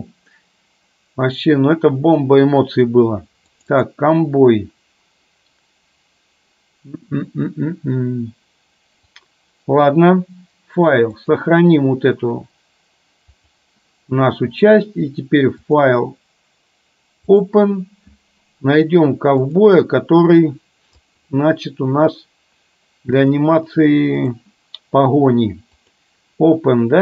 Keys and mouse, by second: 11.2-13.7 drag, 15.7-17.7 drag.